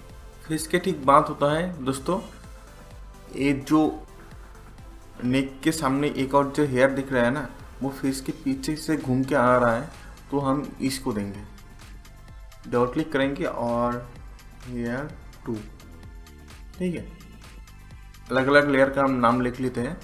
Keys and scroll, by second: 13.7-15.4 typing.